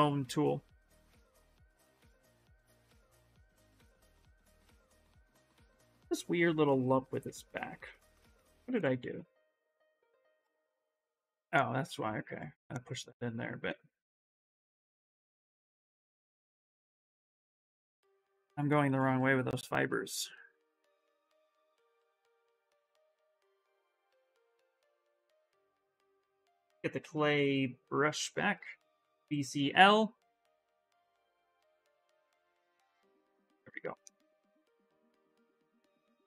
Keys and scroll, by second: 5.2 s, 17.2 ctrl+z, 17.6 ctrl+z, 17.7 ctrl+z, 17.9 ctrl+z, 18.1 ctrl+z, 18.4 ctrl+z, 18.6 ctrl+z, 18.8 ctrl+z, 18.9 ctrl+z, 19.1 ctrl+z, 26.5-27.5 typing, 28.6-29.8 typing.